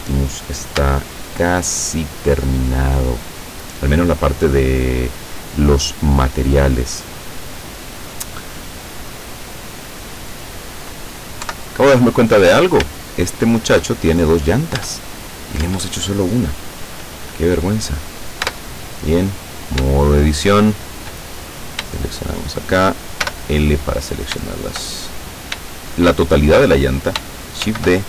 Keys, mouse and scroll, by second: 0.9 Tab, 1.5-2.0 scroll up 1, 2.1-2.7 scroll up 1, 2.9-3.2 scroll up 1, 3.3-4.2 scroll down 2, 4.3 scroll down 1, 4.8-5.8 middle drag, 6.0-10.7 middle drag, 11.5 KP_7, 12.4-12.8 scroll up 1, 13.1 shift+middle click, 14.8 Tab, 15.6 Tab, 18.0 right click, 18.5 Tab, 19.2-19.8 scroll up 1, 20.0-21.2 shift+right drag, 22.2 shift+right click, 23.2 shift+l, 24.9-25.5 shift+scroll down 3, 25.7-26.7 shift+middle drag, 27.1 shift+middle click, 27.6 shift+d.